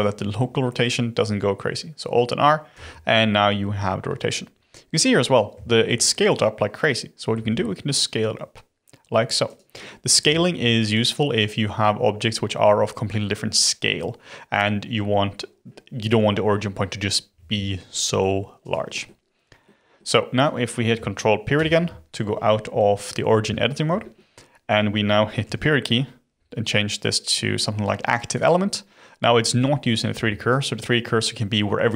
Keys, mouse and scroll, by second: 2.7 alt+r, 3.1-3.8 middle drag, 3.8-5.0 scroll down 7, 5.0-5.6 scroll up 3, 5.6-7.3 shift+middle drag, 7.3 s, 9.7-10.3 scroll up 5, 9.7 middle click, 10.3-13.3 shift+middle drag, 15.6-16.5 scroll down 7, 16.5-16.9 scroll up 8, 17.3 s, 18.9-21.5 middle drag, 21.5 ctrl+., 23.5-25.4 shift+middle drag, 25.4 ., 30.5-31.9 shift+right drag.